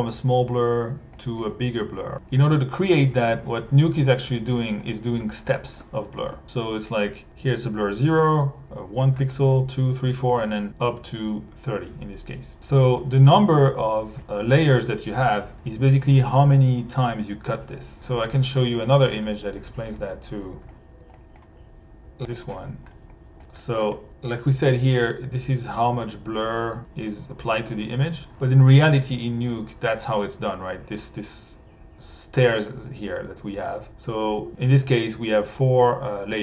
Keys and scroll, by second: 20.7 r.